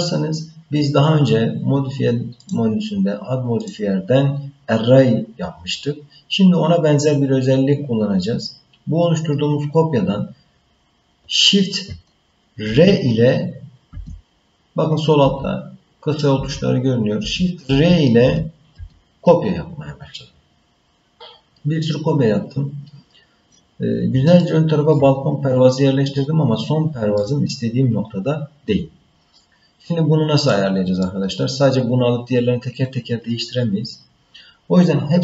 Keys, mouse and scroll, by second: 2.4 click, 3.6-5.5 drag, 12.6 shift+r, 13.9 shift+r, 15.2 shift+r, 16.4-18.7 typing, 24.4 shift+middle click, 25.4-27.2 scroll up 1, 27.2-29.3 middle drag, 30.1 scroll down 1, 30.5 middle click.